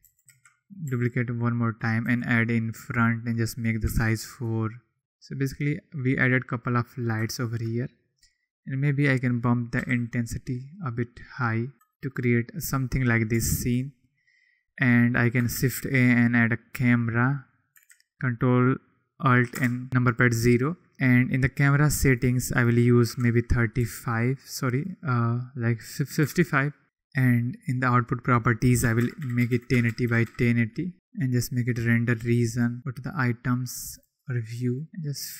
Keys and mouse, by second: 0.0 g, 0.2 KP_7, 0.2 shift+d, 0.6 click, 0.8 r, 2.0 g, 2.3 click, 3.2 click, 4.5 drag, 8.6-9.9 drag, 13.5 ctrl+s, 15.5 shift+a, 19.5 ctrl+alt+KP_0, 22.1-26.4 drag, 26.2 5, 28.2-30.9 drag, 31.3 click, 32.8 n, 33.9 click, 34.6 click.